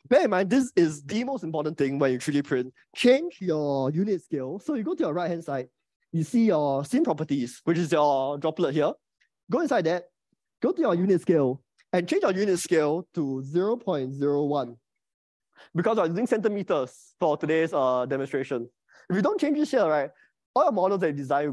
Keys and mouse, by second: 9.2 right click, 11.5-21.5 drag.